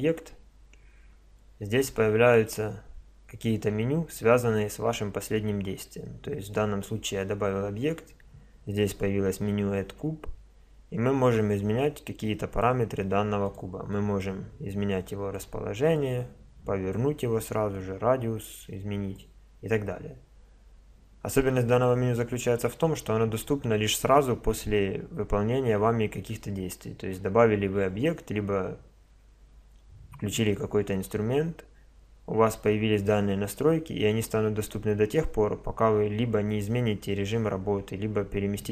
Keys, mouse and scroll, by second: 11.8-13.7 drag, 13.9-15.8 drag, 15.9-19.6 drag.